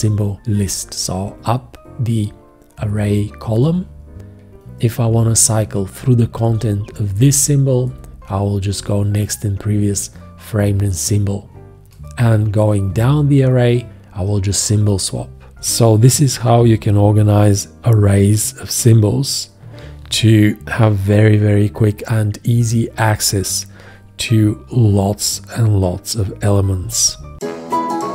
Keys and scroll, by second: 0.5 alt+', 3.6 alt+', 6.5 shift+., 15.5 shift+., 22.0 shift+., 22.4 alt+', 23.1 alt+', 23.9 shift+., 25.3 alt+', 26.0 ctrl+,.